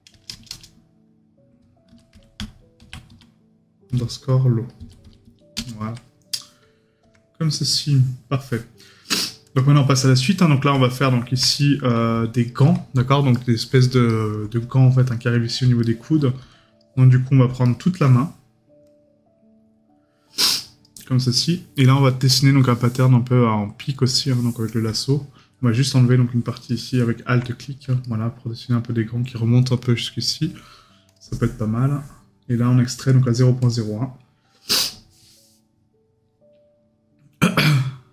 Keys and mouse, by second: 10.2 right click, 13.3 right click, 15.8 right click, 17.6 right click, 28.0 right click.